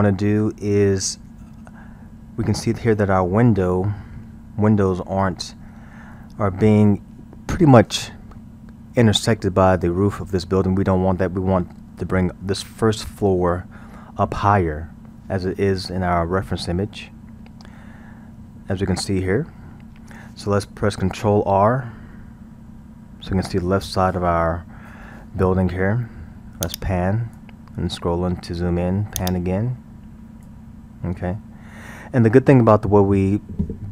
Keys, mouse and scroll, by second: 26.6-27.7 drag, 27.7 scroll, 29.2-30.8 drag, 30.8-33.9 scroll.